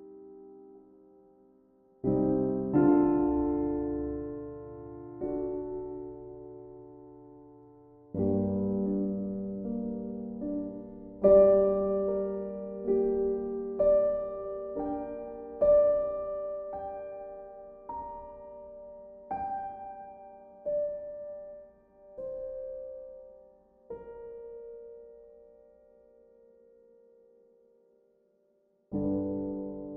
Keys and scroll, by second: 7.5 b, 9.7 ctrl+z, 14.0 ctrl+z, 17.2 ctrl+z, 24.0 b.